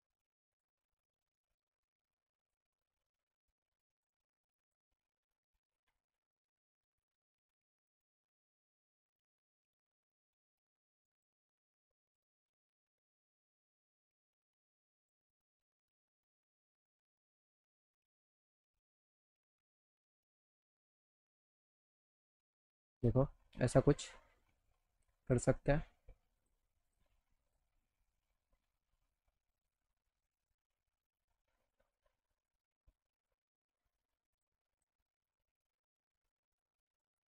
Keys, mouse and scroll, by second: 0.5 click, 1.2 alt+middle click, 2.4 click, 3.0 alt+middle click, 4.0 click, 4.7 click, 7.7 click, 10.5 click, 13.7 right click, 15.0 click, 16.7 alt+middle click, 17.4 middle click, 19.2 click, 21.4 click, 25.3 click, 26.4 click, 26.9 click, 27.4 click, 28.6-30.1 alt+middle drag, 30.9-32.3 alt+middle drag, 32.7 middle click, 34.3 click, 34.8 click, 35.6 alt+middle click, 36.7 middle click.